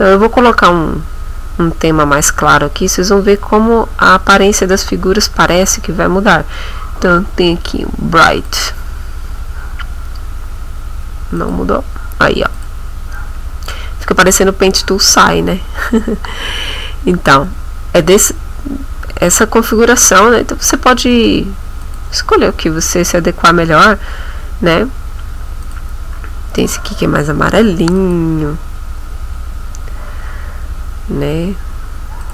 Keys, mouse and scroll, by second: 8.5 click, 11.4 click, 12.5 click, 21.8 click, 25.6 click, 28.0 click, 32.2 click.